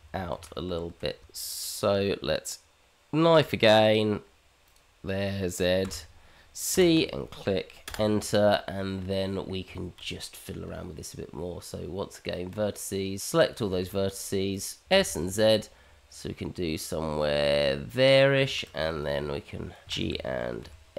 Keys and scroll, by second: 3.3 k, 10.6 Tab, 13.6 shift+z, 14.4 shift+z, 14.8 s, 15.0 Escape, 18.5 shift+z, 20.0 shift+z, 20.4 g.